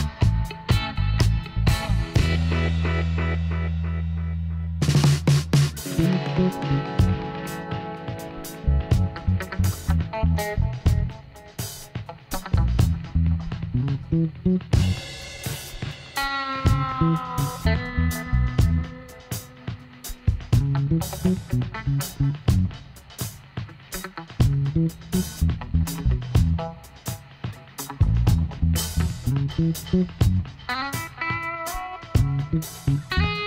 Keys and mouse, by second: 3.4-5.9 middle drag, 4.1 e, 6.7 r, 8.4 middle click, 8.5-10.1 drag, 9.1 e, 13.2 r, 14.6 click, 15.1 e, 16.4 middle click, 17.4 click, 18.2 s, 21.2-24.8 drag, 27.2-30.4 middle drag, 27.9 e, 31.1 r, 32.3-33.4 middle drag, 33.2 e.